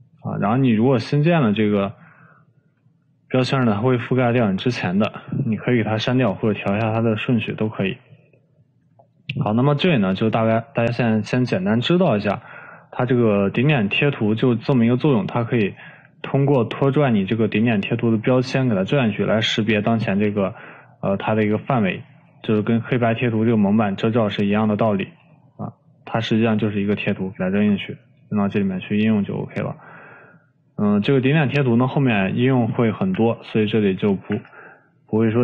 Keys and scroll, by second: 3.9 Delete, 33.8 Delete, 35.1 Delete.